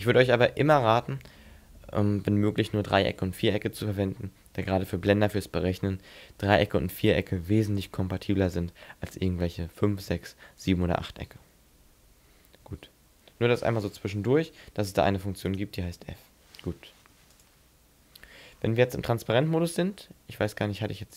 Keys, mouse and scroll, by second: 12.1 Tab, 12.7 Tab, 15.5 right click, 15.8 l, 17.0 Delete, 18.2-18.6 scroll down 4, 18.6 scroll up 6, 18.9 z, 19.5 shift+middle click, 19.9 scroll up 2, 20.6 shift+middle click.